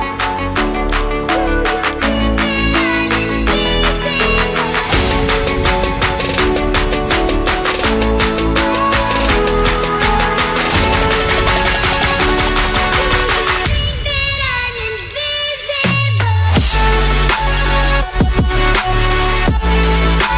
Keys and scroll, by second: 8.4 0, 15.4 0, 18.2 0.